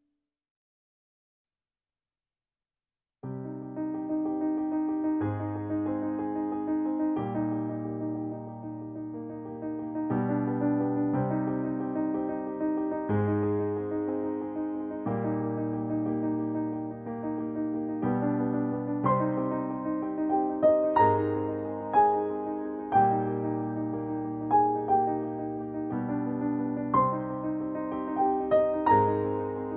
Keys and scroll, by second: 7.3 ctrl+i.